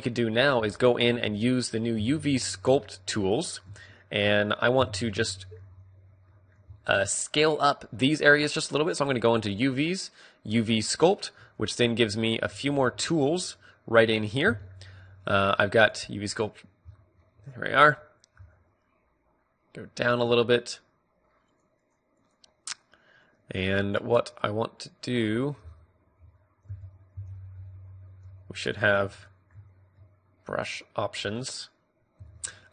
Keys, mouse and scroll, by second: 0.9 t, 2.1 t, 2.1 n, 2.8-4.3 drag, 3.7-6.4 middle drag, 4.8 n, 5.5 t, 10.2-20.1 drag, 20.1 f.